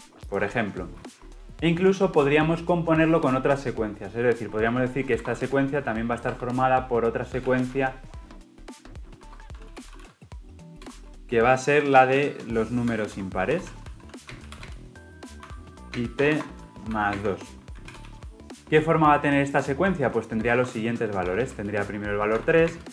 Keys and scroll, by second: 17.8 ctrl+alt+l, 19.7 ctrl+alt+o.